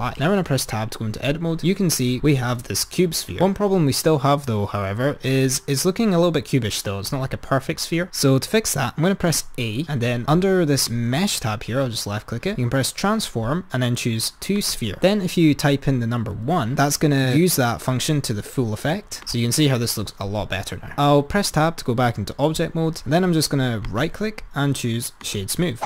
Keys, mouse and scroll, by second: 0.5 Tab, 10.9-20.0 drag, 23.9-25.8 right drag.